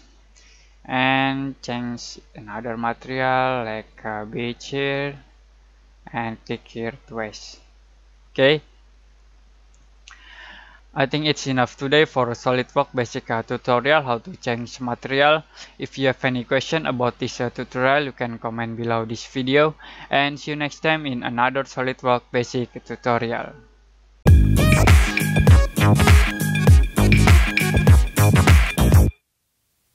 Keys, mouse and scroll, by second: 9.7 click.